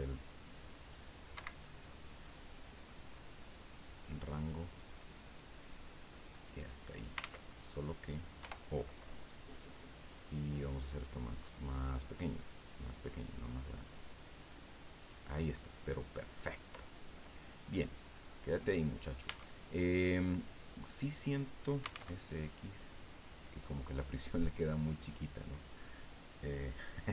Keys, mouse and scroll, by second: 1.3 Escape, 1.6 click, 2.4 middle click, 4.1-7.2 drag, 7.2 ctrl+z, 8.4 o, 10.1 click, 10.7-11.3 scroll down 2, 11.4-12.1 scroll up 3, 12.1-13.2 scroll down 2, 15.5-16.7 drag, 16.8 scroll down 2, 17.1 click, 18.1-18.5 scroll up 2, 18.8 scroll down 2, 19.2 Tab, 20.2 right click, 21.6-22.4 typing, 24.8 click.